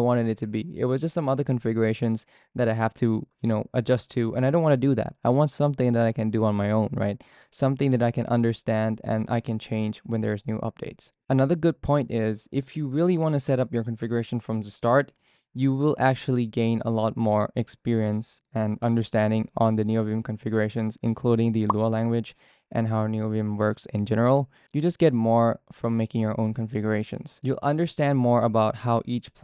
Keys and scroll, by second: 26.7-29.4 typing.